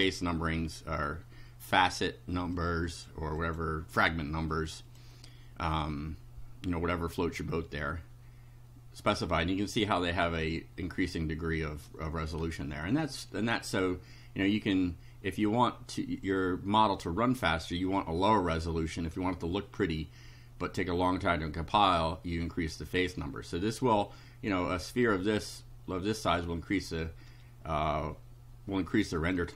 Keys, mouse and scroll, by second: 2.6 click, 3.4 click, 4.5 click, 29.2 click.